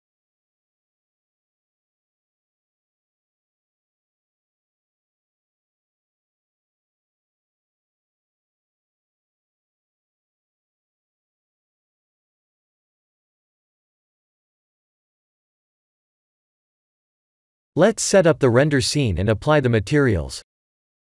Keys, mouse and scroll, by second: 0.0-0.4 scroll down 3, 1.0 click, 1.6 right click, 2.7 click, 3.2 middle click, 6.8 click, 7.4 click, 9.5 click, 11.7 click, 12.8 middle click, 16.1 middle click, 17.1-17.6 scroll down 3, 17.4 middle click, 18.3 ctrl+alt+KP_0, 19.0 shift+`, 20.9 click.